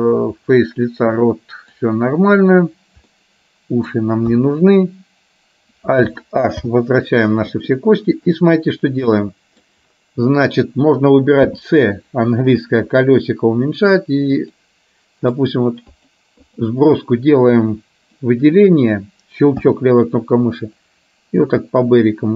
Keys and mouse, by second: 3.3 middle click, 4.4 KP_1, 6.8 alt+h, 8.1-9.8 middle drag, 16.0-17.0 drag.